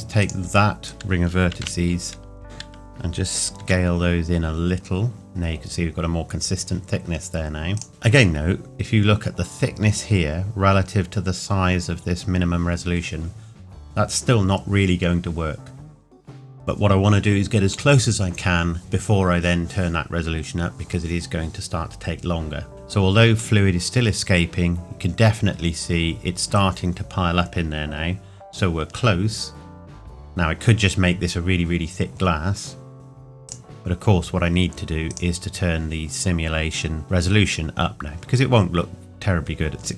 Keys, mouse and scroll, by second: 0.2 alt+click, 3.6 s, 5.1 Tab, 7.7 click, 8.7-9.1 scroll up 1, 24.0-24.3 scroll up 1, 30.1-31.0 scroll down 1, 33.4 click, 38.0-39.9 scroll down 1.